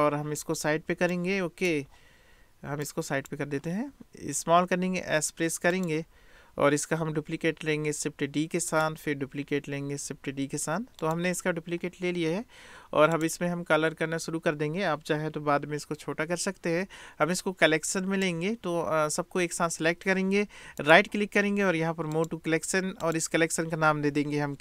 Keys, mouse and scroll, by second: 1.2 click, 1.5 middle click, 2.9 click, 4.6 s, 7.6 shift+d, 10.2 shift+d, 13.1 click, 17.4-18.3 drag, 20.9-24.6 drag.